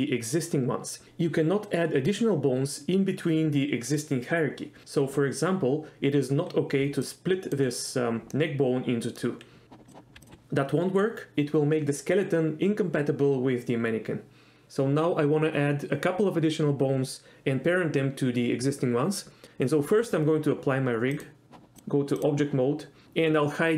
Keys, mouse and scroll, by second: 6.9-7.6 d, 7.2 click, 8.4 middle click, 9.9 click, 10.2 d, 10.2 click, 10.3 d, 21.3 click, 21.8 click.